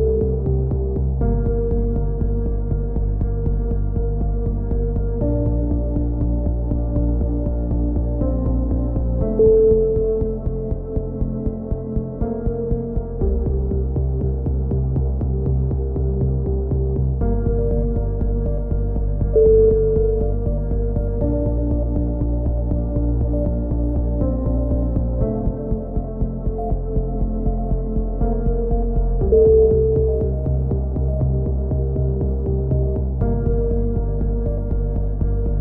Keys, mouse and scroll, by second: 1.5 z, 2.0 Tab, 5.4 ctrl+KP_7, 6.1-7.2 drag, 8.2 Tab, 9.7-11.3 middle drag, 16.1 ctrl+KP_7, 16.5 z, 17.5 z, 18.2 z, 19.0 z, 21.1 z, 21.7 z, 24.2 g, 27.0 KP_3, 27.6 z, 28.3-29.5 drag, 30.5 z, 30.7 a, 31.2 Tab, 31.9 click, 32.7 KP_1, 33.6 z, 34.5 z.